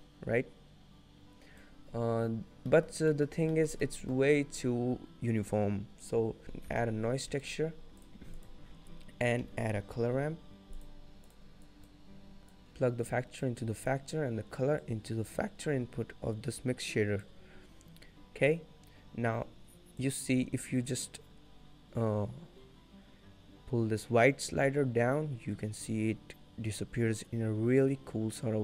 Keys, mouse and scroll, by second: 2.1 scroll down 2, 2.6 scroll up 3, 2.9 middle click, 2.9-3.4 scroll down 3, 3.3 middle click, 3.7 shift+middle click, 4.3 middle click, 4.5 scroll up 1, 5.1-6.0 scroll down 2, 6.4 scroll down 1, 6.4 click, 6.4 shift+a, 8.7 shift+a, 11.8 click, 12.7 click, 15.0 click, 20.2 click.